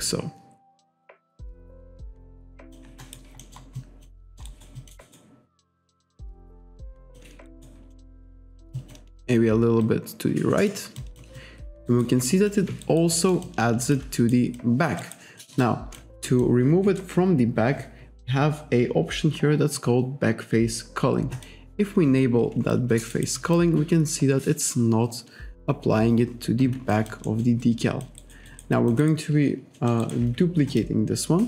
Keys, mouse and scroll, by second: 3.0 alt+right click, 3.4 alt+middle click, 3.8 alt+click, 4.3 alt+middle click, 4.5 alt+right click, 5.1 alt+right click, 5.6 alt+click, 6.6 click, 7.5 alt+right click, 7.9 alt+middle click, 8.5 alt+right click, 8.8 alt+click, 9.9 click, 11.0 alt+click, 11.9 alt+right click, 12.3 alt+click, 12.9 alt+right click, 13.2 alt+middle click, 13.5 alt+click, 14.2 alt+right click, 14.6 alt+click, 15.0 alt+right click, 15.4 alt+middle click, 15.7 alt+click, 16.3 alt+click, 17.2-18.0 scroll up 1, 21.3 click, 22.8 alt+click, 23.2 alt+right click, 27.0 alt+click, 27.7 alt+click, 28.3 alt+right click, 28.8 alt+click, 29.0 alt+right click, 29.8 alt+middle click, 30.1 alt+right click, 30.7 click.